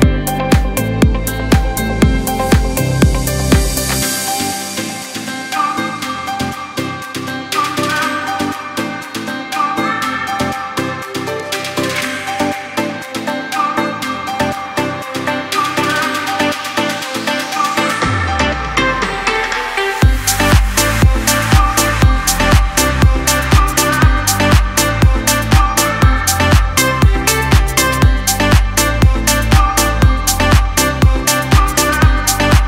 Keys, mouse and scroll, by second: 1.0 ctrl+g, 1.6 alt+scroll down 1, 2.4 alt+scroll down 1, 3.4-15.3 drag, 7.4 typing, 15.6 alt+scroll down 1, 16.3 click, 16.6 space, 16.6 click, 17.1 space, 17.7 click, 18.7-19.1 alt+scroll up 1, 19.2 space, 19.3 click, 19.7 space, 21.0 click, 21.3 space, 22.0-32.3 drag, 32.3 Return.